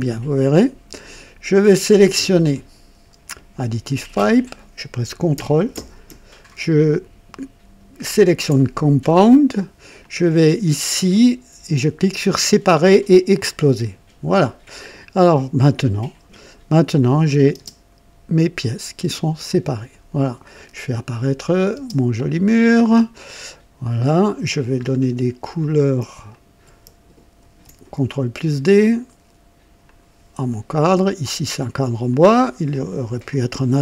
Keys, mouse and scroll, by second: 0.6 click, 1.8 click, 3.8 click, 8.0 ctrl+click, 9.9 click, 13.3 click, 15.1 scroll up 1, 15.5 right click, 16.9 click, 17.5 space, 18.9 space, 19.0 space, 19.4 click, 21.4 click, 21.7 space, 22.5-23.1 scroll down 2, 23.2 click, 23.8 scroll up 1, 24.8-25.1 scroll down 1, 25.6 click, 26.3 shift+click, 27.4 d, 28.7 click, 29.8 click, 30.8 click, 32.0 click, 32.7 click, 33.3-33.8 drag.